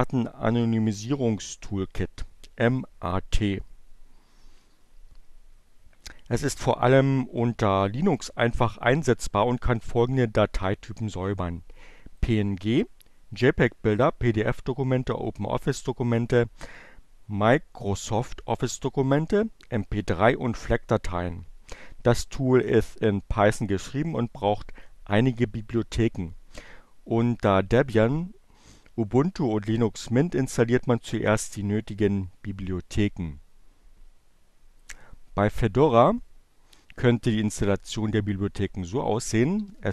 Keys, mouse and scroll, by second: 12.0 click, 33.4-34.9 drag, 37.5-38.4 typing.